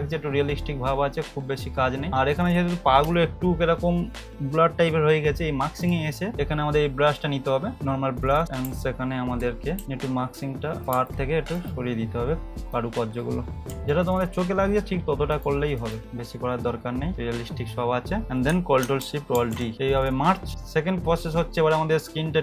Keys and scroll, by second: 9.8 typing, 13.7 x, 19.3 ctrl+alt+shift+e.